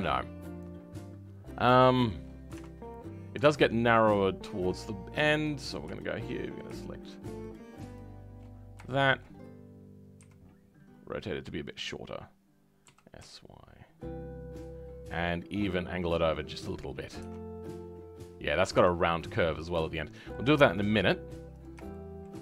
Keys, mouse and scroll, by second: 0.0 g, 1.4-1.7 scroll down 4, 1.7 shift+middle click, 3.5-5.4 shift+middle drag, 5.4 click, 5.7 scroll up 2, 5.9 shift+middle click, 6.3-7.5 scroll up 2, 7.5 shift+Left, 7.9 shift+Left, 8.5-8.8 scroll down 4, 8.8 shift+middle click, 9.7-10.2 scroll down 1, 18.8 s, 19.7-21.5 middle drag, 21.5 click, 21.9 shift+middle click.